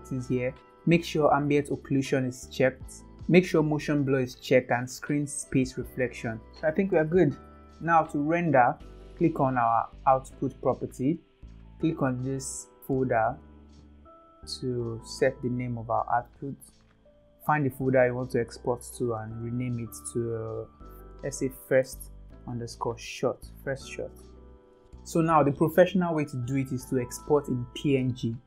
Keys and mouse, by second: 5.6 click, 6.4 ctrl+s, 7.6 ctrl+s, 10.5 click, 12.9 click.